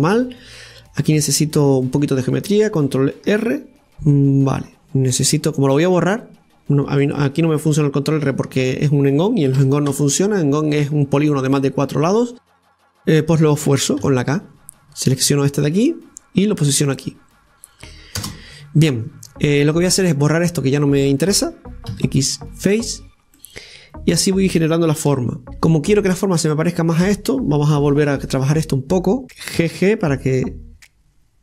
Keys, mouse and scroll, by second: 0.7-1.8 scroll up 1, 3.5 scroll up 1, 14.0 k, 18.7 scroll down 1, 20.3 click, 20.9 right click, 23.4-25.1 middle drag, 27.7 Tab, 27.9 right click, 28.3 Tab, 29.0-29.6 scroll up 2, 29.6 right click.